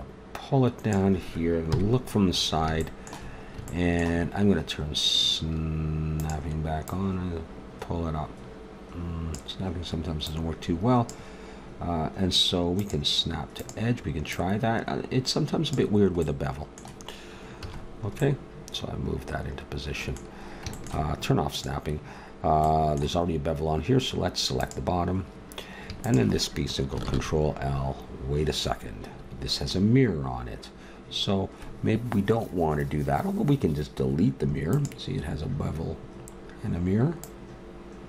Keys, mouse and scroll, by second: 0.7 click, 1.6 KP_3, 6.2-8.6 drag, 8.6 middle click, 10.2-12.1 drag, 12.8-16.1 drag, 16.3-17.6 middle drag, 17.6 a, 21.5-23.4 middle drag, 23.4-27.0 right drag, 27.0 ctrl+l, 34.7-36.5 drag, 37.2-38.0 drag.